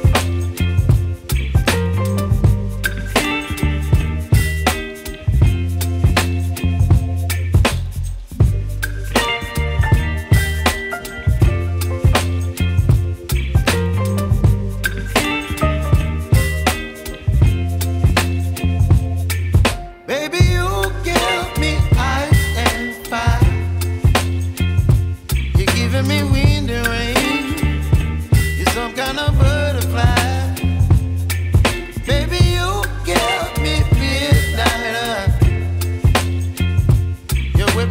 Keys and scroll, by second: 9.0 alt+Tab, 13.5 Tab, 16.1 space.